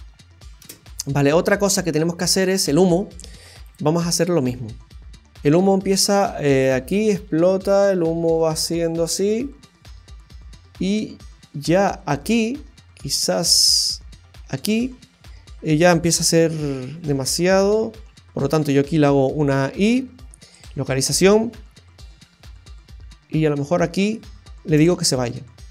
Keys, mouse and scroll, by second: 0.6 space, 1.3-1.9 scroll down 3, 1.7 middle click, 3.6 click, 5.4 click, 16.5-17.3 Left, 17.4 Left, 17.9 Left, 18.1 Left, 21.6-23.3 Right, 24.7 i.